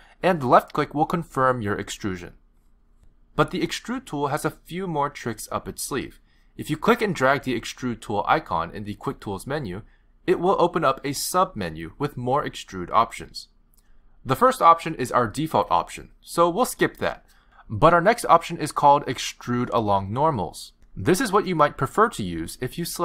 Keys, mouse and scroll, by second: 0.6 s, 1.8 e, 7.9 click, 22.8 click.